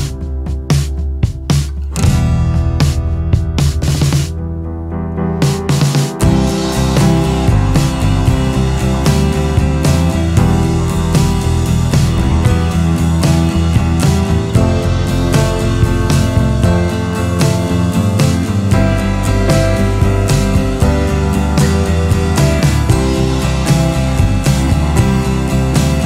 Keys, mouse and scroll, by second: 6.2 click, 8.7 click.